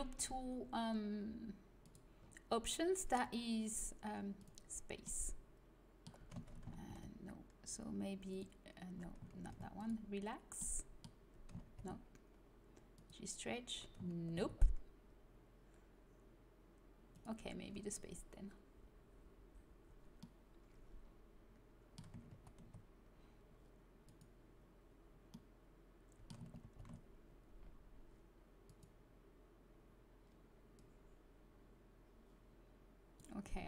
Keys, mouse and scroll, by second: 4.3-6.1 drag, 6.7 ctrl+z, 8.2-10.3 drag, 9.3 ctrl+z, 11.6 ctrl+z, 14.1 ctrl+z, 17.2-19.0 drag, 20.1 middle click, 22.2 ctrl+z, 24.0-26.6 drag, 26.6 ctrl+z, 26.6-27.8 middle drag, 28.6-30.4 drag, 30.7-32.5 drag.